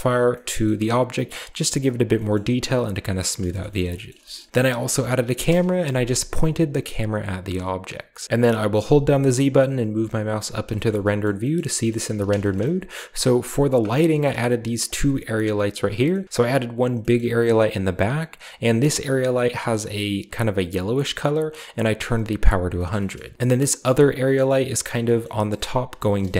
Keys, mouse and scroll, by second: 0.2-2.0 scroll up 1, 0.6-2.0 middle drag, 2.2-4.1 middle drag, 2.9-4.0 scroll down 2, 4.2 shift+middle drag, 4.5 alt+h, 5.3 KP_0, 8.0 click, 8.2-9.2 scroll up 2, 8.7-10.1 typing, 10.7-11.8 shift+middle drag, 12.0 a, 12.1-12.9 shift+scroll down 1, 13.6 right click, 13.9 scroll down 2, 14.7 shift+right click, 15.6 right click, 15.8 scroll down 2, 16.0 middle click, 17.0 middle click, 17.0-17.9 scroll up 1, 18.3-19.2 drag, 19.4-20.2 drag, 22.6 shift+middle click, 23.2 scroll down 1, 23.2 a, 23.3 g, 24.2-24.9 middle drag, 25.1 middle click, 26.0-26.3 shift+scroll up 1, 26.0-26.3 shift+middle drag.